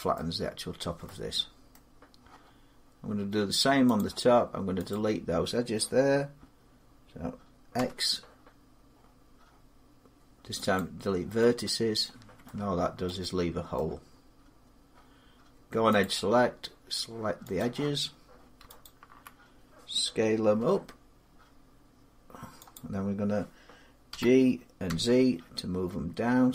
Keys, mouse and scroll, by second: 0.3 scroll down 3, 1.3 scroll, 1.5 middle click, 3.8 click, 4.8 click, 7.5 x, 10.6 click, 11.8 middle click, 12.9 shift+middle click, 13.0-13.6 scroll, 13.6 shift+middle click, 15.8 click, 17.4 click, 18.6 alt+click, 20.4 s, 22.5 click, 23.9 g, 24.7 z.